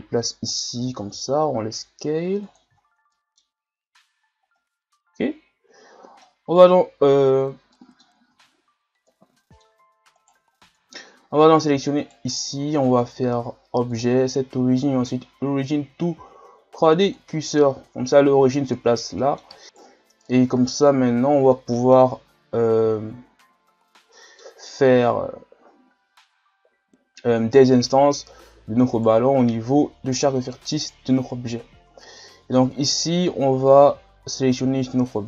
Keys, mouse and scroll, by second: 0.9 s, 2.8 shift+scroll down 3, 3.1 middle click, 3.5 scroll up 2, 4.1-4.6 scroll down 1, 4.6-7.5 middle drag, 7.5 scroll down 1, 7.7 middle click, 8.3 Tab, 9.1-10.3 middle drag, 10.3 right click, 10.8-12.0 middle drag, 12.0 right click, 12.5-13.9 middle drag, 13.9-19.2 drag, 19.2 middle click, 19.6 right click, 19.7 right click, 20.2-27.2 middle drag, 28.9 right click, 30.2 right click.